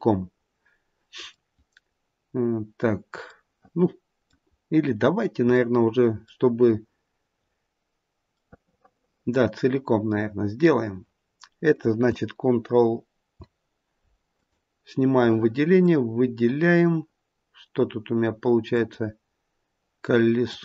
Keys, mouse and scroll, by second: 3.3 middle click, 4.4-5.1 scroll up 1, 5.1-5.5 scroll down 1, 5.6 middle click, 5.7 middle click, 8.4 middle click, 8.8 middle click, 8.9 middle click, 14.3 click, 15.2 click, 16.6-18.1 scroll down 2, 18.6 click, 20.4 click.